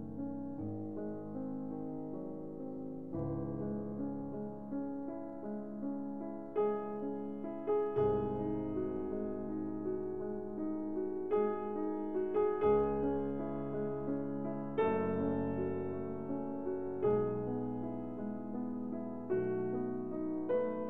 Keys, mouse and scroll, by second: 2.6 click, 3.2 click, 4.6 click, 5.3 click, 8.7 click, 15.4 click, 17.1 click, 17.3 click, 19.9 click.